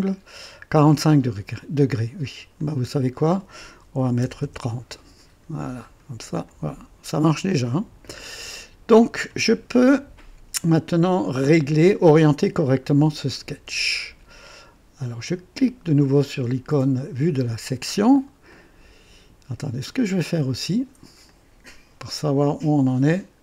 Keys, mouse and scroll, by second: 0.4 typing, 2.5 click, 3.9 typing, 4.4 KP_Enter, 5.8 click, 6.4-9.3 drag, 13.1 click, 14.4-14.7 scroll up 1, 17.1 click, 17.8 scroll up 1, 18.5 right click, 19.8 click, 21.2 click, 23.1 click.